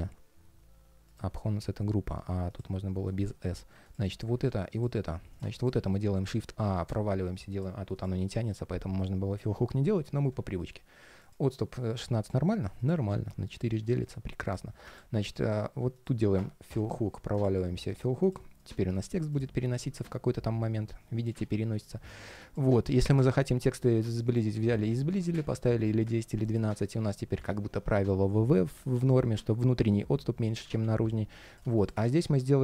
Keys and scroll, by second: 21.1 super+z, 30.5 super+z, 31.7 super+space.